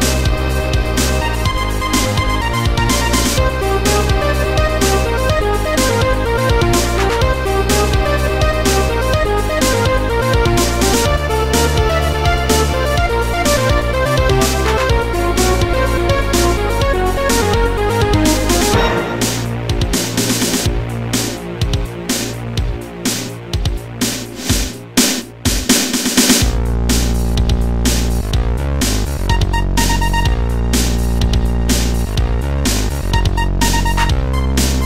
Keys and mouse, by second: 0.5 click, 1.4 click, 2.0 click, 2.8 click, 5.0 click, 10.6 click, 15.1 click, 16.3 click, 18.2 click, 19.1 click, 20.0 click, 21.2 click, 22.2 click, 24.1 click, 24.7 click, 26.9 click, 28.8 shift+click, 30.0 shift+click, 31.0 shift+click, 32.1 click, 32.5 click, 34.6 click.